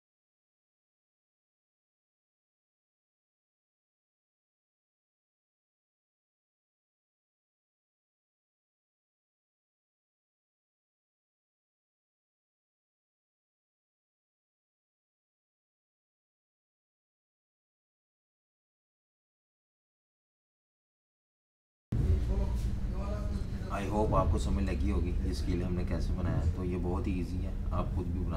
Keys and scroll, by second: 2.7-3.5 typing, 4.7 typing, 6.6 i, 10.1 v, 10.7 i, 13.9 v, 17.8-20.4 typing, 21.8 Page_Up, 23.6-25.5 typing.